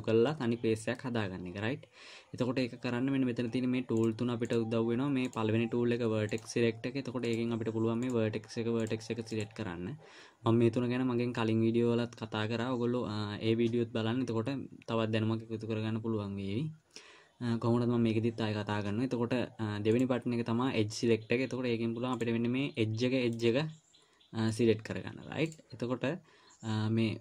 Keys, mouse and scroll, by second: 4.3 click, 4.9 click, 6.6 click, 9.2 click, 9.7 click, 20.3 click, 22.6 click, 24.9 click, 25.9 click.